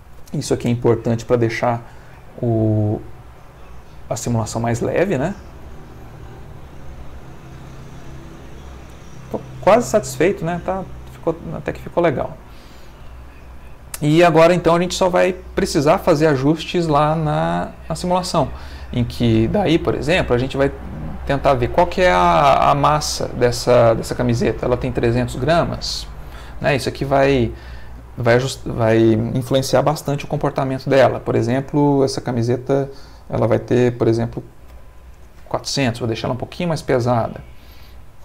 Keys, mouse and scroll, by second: 9.9 Escape, 11.6-12.7 middle drag, 17.8 click, 19.1 middle click, 30.8 click, 34.5 ., 34.7 4, 35.1 Return, 36.5-37.7 middle drag.